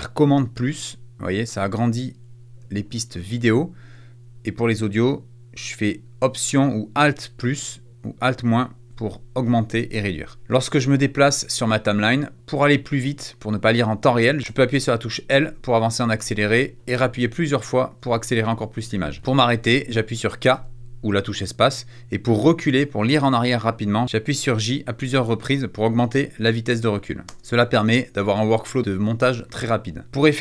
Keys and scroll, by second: 0.3 super+=, 2.2 super+-, 3.3 super+=, 7.1 alt+=, 8.0 alt+-, 10.4 space, 14.3 space, 15.0 l, 18.0 space, 18.7 l, 19.2 space, 19.3 l, 20.4 k, 22.7 j, 24.0 j, 27.1 space, 28.2 -, 28.3 =, 30.0 =.